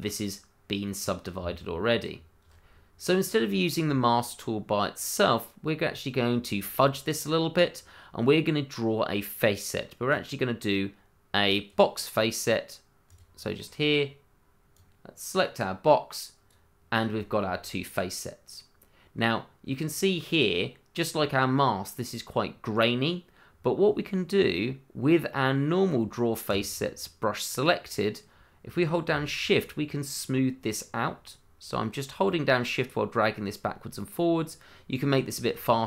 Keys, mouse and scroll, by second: 0.0 scroll up 1, 0.9-1.4 scroll down 1, 1.4 Tab, 2.9 middle click, 5.8-7.0 scroll down 1, 10.1 click, 13.6 middle click, 14.7 click, 17.2 shift+middle click, 17.3 middle click, 17.5 scroll up 1, 17.8 middle click, 19.8-21.9 scroll up 1, 23.5-25.5 scroll down 1, 26.5 click, 29.3 shift+click, 29.4 click, 29.5 shift+click.